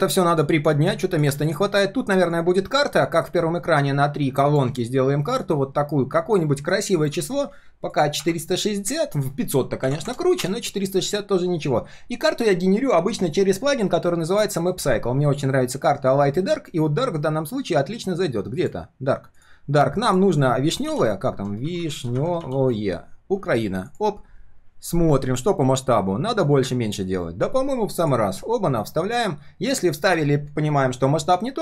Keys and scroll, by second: 1.7 ctrl+shift+4, 2.7 ctrl+shift+4, 14.3 ctrl+/.